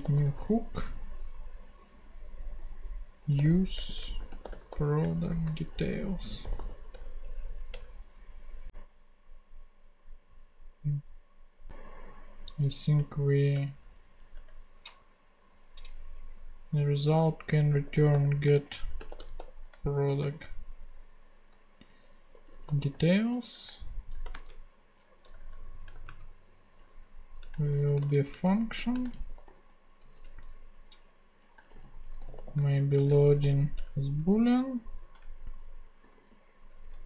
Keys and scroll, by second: 0.0 super+h, 0.1 o, 0.7 Return, 3.1-7.2 typing, 12.9 Return, 14.2 Up, 14.3 Tab, 17.6-30.0 typing, 30.2 Return, 31.3-33.8 typing, 34.9-37.0 typing, 35.1 Return.